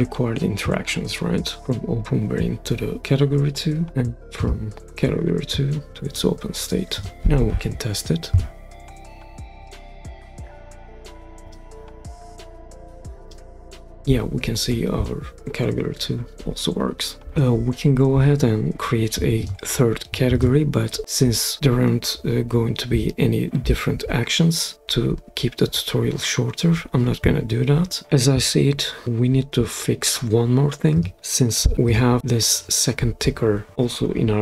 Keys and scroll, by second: 8.3 super+p.